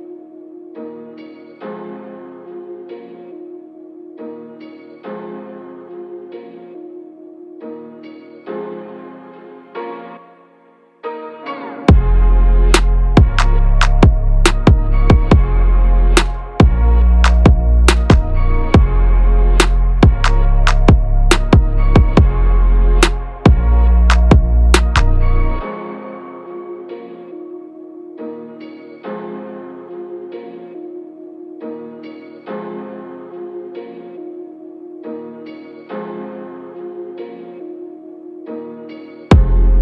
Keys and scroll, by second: 22.5 Up, 30.7 BackSpace.